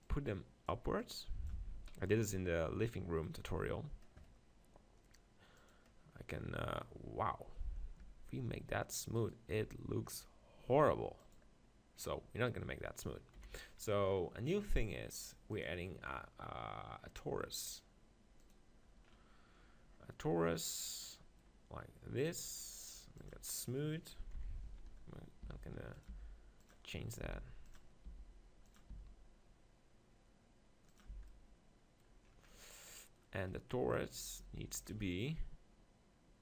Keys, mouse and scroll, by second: 1.0-2.1 drag, 1.6 Tab, 1.7 z, 2.1 middle click, 5.6-7.5 drag, 6.9 right click, 8.0 Tab, 9.2-11.0 right drag, 9.5 Tab, 11.2-12.8 drag, 13.4 KP_7, 16.9 click, 19.5-22.7 middle drag, 23.2-25.1 drag, 24.3 KP_7, 24.6 z, 25.4 s, 26.1 g, 26.7-27.7 drag, 27.2 s, 28.1 g, 29.0 s, 30.3 click, 31.1 z, 34.9-36.4 drag.